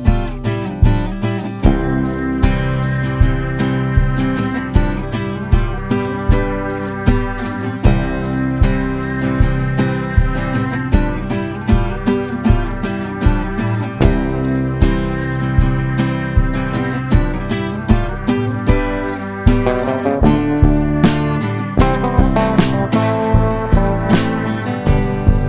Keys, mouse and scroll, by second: 0.6 click, 1.3-2.3 drag, 2.8 middle click, 4.8-6.3 drag, 7.7 ctrl+a, 8.5 Tab, 9.7 click, 11.1 shift+g, 13.1 x, 14.9 click, 16.0 shift+g, 17.9 x, 19.8 middle click, 20.4 click, 20.5 click, 21.5 shift+g, 22.8 middle click, 24.8 x.